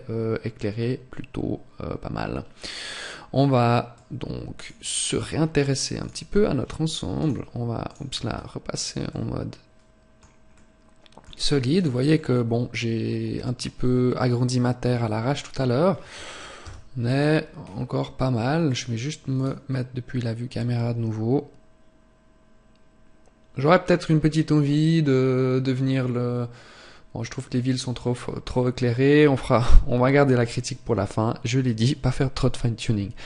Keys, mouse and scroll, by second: 4.0 click, 4.8 scroll down 2, 5.7 click, 6.9 click, 7.9-8.4 scroll down 1, 8.5 scroll down 1, 8.7 middle click, 11.4 right click, 11.8 middle click, 16.3 KP_0, 17.3-17.7 scroll down 1, 17.9 scroll down 2, 18.3 click.